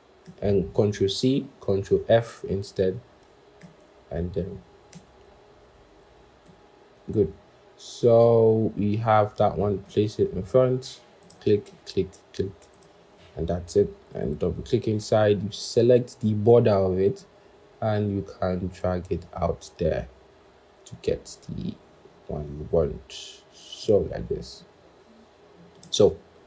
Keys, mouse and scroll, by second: 0.1 ctrl+[, 3.4 ctrl+[, 4.8 ctrl+[, 6.3 ctrl+[, 9.7 ctrl+], 11.1 shift+click, 11.6 right click, 14.1 double click, 24.4 double click.